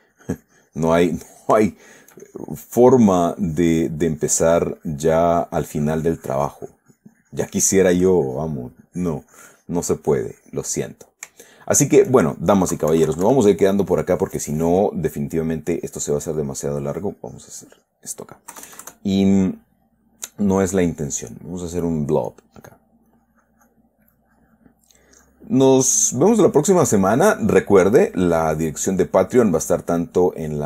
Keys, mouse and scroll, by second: 1.8 shift+click, 2.1 shift+middle click, 2.6-4.5 shift+drag, 6.6-11.3 drag, 11.3 middle click, 11.8 shift+middle click, 13.1 KP_Subtract, 14.0-15.9 middle drag, 16.1-18.5 drag, 18.9 KP_Add, 20.7 click, 22.7 click, 23.5 click, 24.5 click, 25.4 click, 26.5 click, 27.5 click, 28.3 click, 28.9 click, 29.8 click.